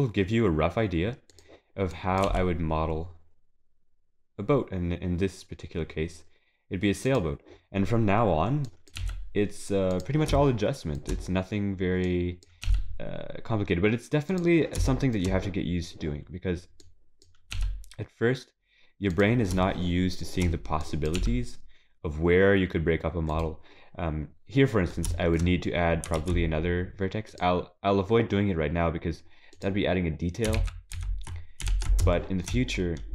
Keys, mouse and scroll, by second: 2.2 click, 4.9 g, 9.0 click, 10.4 shift+middle click, 12.0 click, 12.6 g, 14.8 shift+middle click, 15.8-16.8 scroll down 1, 16.8 click, 17.5 g, 19.7 shift+middle click, 20.8 click, 21.2 g, 23.9-25.1 scroll down 8, 25.1 shift+middle click, 25.4 scroll up 4, 26.1 ctrl+r, 30.6 ctrl+z, 31.3 ctrl+z, 31.7 ctrl+s, 32.1 shift+middle click, 32.9-33.1 scroll down 2.